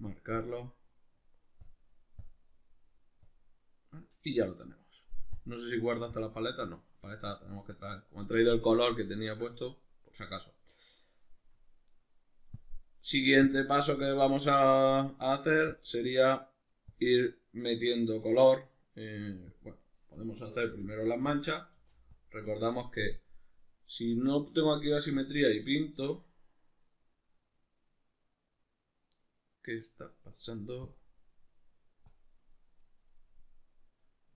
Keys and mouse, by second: 4.4 middle click, 5.3-8.8 drag, 8.8-12.6 middle drag, 12.6 click, 20.7 f, 21.4 click, 21.8 f, 22.2 click, 23.3-25.2 middle drag, 25.2-34.3 drag.